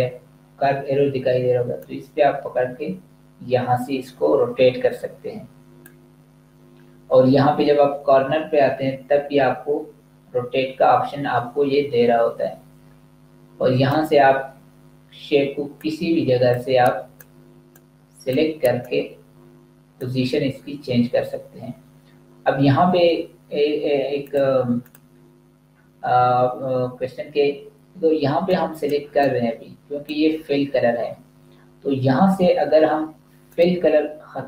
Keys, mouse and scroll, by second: 1.7 click, 13.8 click, 24.1 click, 28.3 click, 33.3 click.